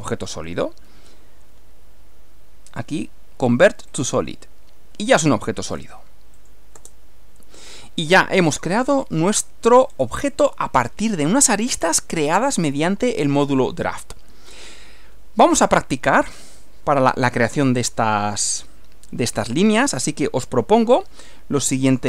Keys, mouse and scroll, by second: 3.9 click, 5.0 scroll down 1, 5.1 scroll up 1, 5.7 scroll down 1, 6.3 click, 6.7 space, 7.7 scroll down 2, 8.5-9.6 shift+middle drag, 9.7-10.1 shift+scroll up 3, 10.5 scroll down 2, 10.9-11.9 shift+middle drag, 12.1-14.8 shift+middle drag, 21.8 click.